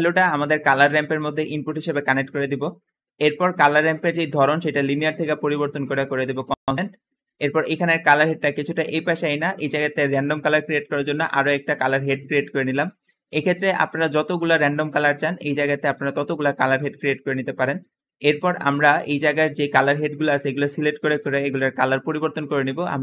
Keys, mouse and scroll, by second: 0.0 click, 2.3-3.1 scroll down 2, 2.7 middle click, 3.1-3.8 scroll up 1, 4.2 click, 6.4 click, 8.0 click, 11.1 click, 12.0 middle click, 12.0-15.0 scroll up 3, 13.7 `, 13.9 click, 14.8 click, 17.8 Escape, 18.2 click, 19.2 click, 20.6 click, 22.1 click, 22.8 click.